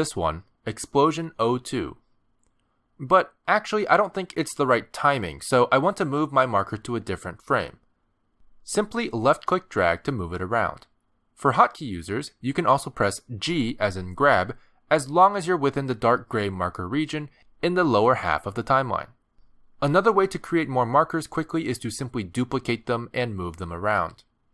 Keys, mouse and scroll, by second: 3.1 Return, 4.9 middle click, 9.7 click, 14.1 g, 17.5 g, 18.6 g.